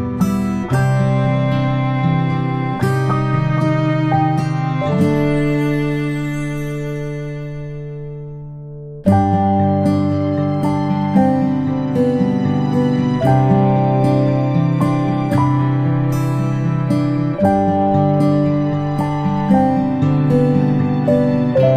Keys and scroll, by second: 1.5 ctrl+space, 1.8 ctrl+space, 6.2 ctrl+z, 6.4 ctrl+z, 12.9-14.7 ctrl+space.